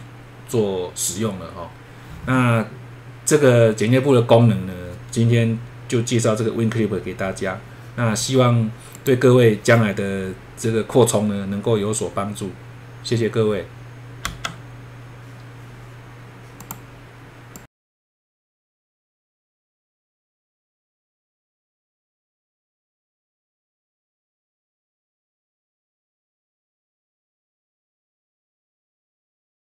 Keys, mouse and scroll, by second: 8.9 click, 14.2 F3, 16.6 click, 17.5 click.